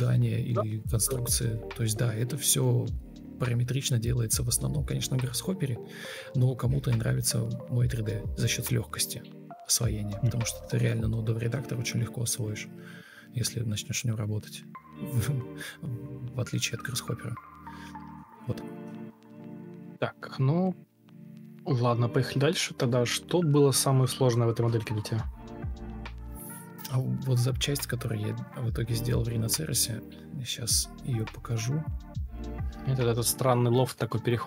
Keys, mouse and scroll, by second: 5.5-7.4 typing, 9.8 ctrl+space, 11.1 Escape, 11.3 ctrl+space, 13.4 Delete, 13.7 ctrl+space, 17.3 ctrl+space, 17.5 ctrl+e, 17.8 b, 18.4 ctrl+space, 19.3 alt+r, 22.7 ctrl+Up, 22.9 ctrl+Right, 23.1 ctrl+Page_Up, 23.2 ctrl+Page_Down, 23.6 ctrl+shift+Page_Up, 24.8 ctrl+Left, 24.9 ctrl+shift+Right, 25.8 Delete, 26.9 ctrl+z, 27.1 Delete, 27.5-30.3 typing, 31.1 Escape, 31.6 ctrl+space.